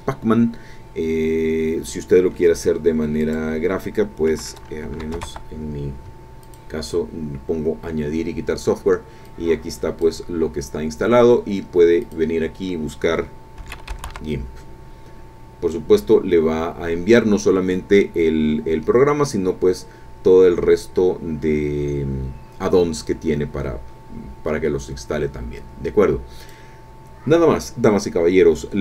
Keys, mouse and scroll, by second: 3.2 click, 5.0 a, 6.4 click, 9.3 click, 12.0 click, 13.6 g, 13.7 i, 13.9 m, 14.0 p, 19.8-20.2 scroll down 2, 20.4-22.1 scroll down 6, 22.4-24.4 scroll up 8, 24.5 scroll up 2, 26.4 click.